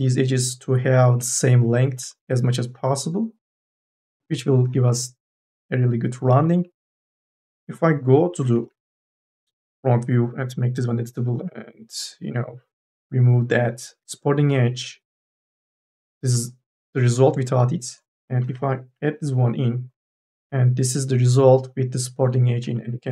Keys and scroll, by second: 7.0 q, 8.0 q, 8.5 n, 8.8 a, 14.2 m, 14.6 n, 18.3 k, 18.8 l.